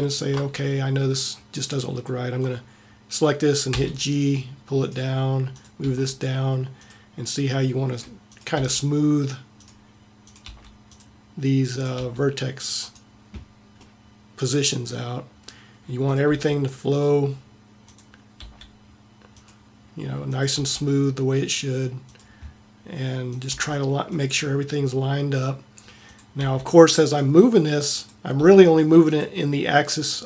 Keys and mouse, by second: 0.0 middle click, 0.2 click, 3.7 g, 5.6 click, 5.8 g, 8.6 g, 10.5 g, 11.9 g, 16.5 g, 18.3 g, 20.0 click, 20.6 g, 23.5 g, 26.6 g, 28.4 g.